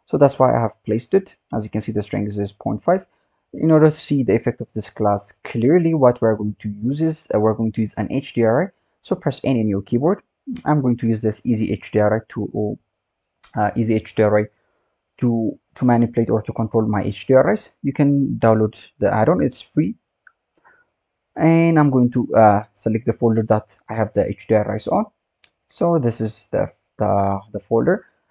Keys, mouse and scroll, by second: 1.3-1.9 scroll down 7, 1.9-2.2 scroll up 1, 2.2-5.2 scroll down 8, 5.2-8.3 scroll down 9, 9.2 n, 10.6 click, 22.1-25.2 drag.